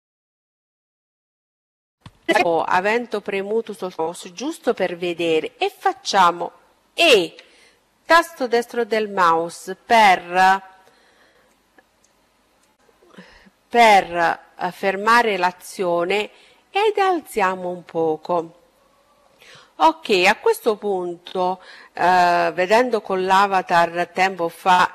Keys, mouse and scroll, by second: 2.8-4.6 middle drag, 5.1 e, 7.5-8.9 middle drag, 15.1-16.1 drag.